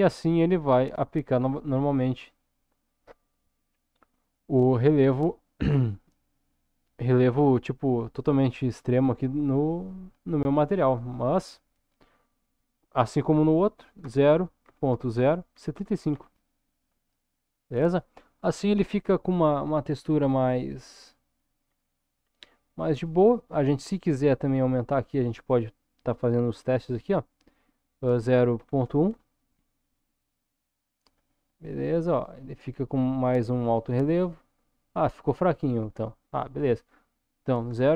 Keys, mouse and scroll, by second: 0.3-1.2 scroll down 1, 1.2-2.5 scroll up 1, 11.0-17.2 drag, 19.9-21.9 middle drag, 22.3 scroll down 1, 23.0 scroll up 1, 24.8-30.6 drag, 31.3-34.3 middle drag, 35.5-37.9 drag.